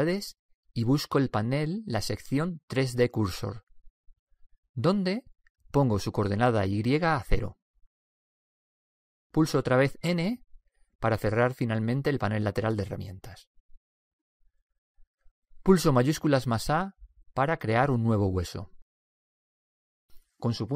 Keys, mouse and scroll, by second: 0.1 n, 1.2-3.0 drag, 6.8-8.6 drag, 12.5 n, 16.9 shift+a.